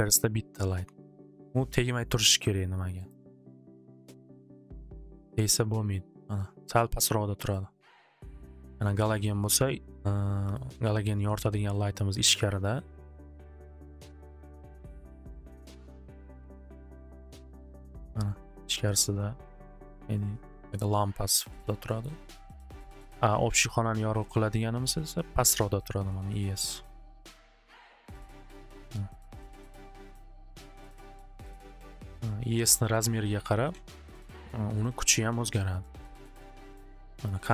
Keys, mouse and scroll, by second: 2.5 click, 3.0 click, 4.8 right click, 5.4 click, 6.2 click, 7.5 click, 8.2 middle click, 8.7 middle click, 9.5 middle click, 10.5 click, 12.2 alt+w, 13.1 alt+w, 13.9-14.7 typing, 15.0 alt+middle click, 15.4 F3, 16.0 middle click, 17.0 click, 17.5 click, 17.9 middle click, 18.6 alt+middle click, 21.6 alt+middle click, 22.0 middle click, 22.6 alt+middle click, 23.8 click, 24.4 middle click, 24.8 middle click, 25.6 alt+middle click, 27.0 alt+middle click, 31.9 click, 33.3 click, 33.4 click, 33.7 typing, 37.4 typing.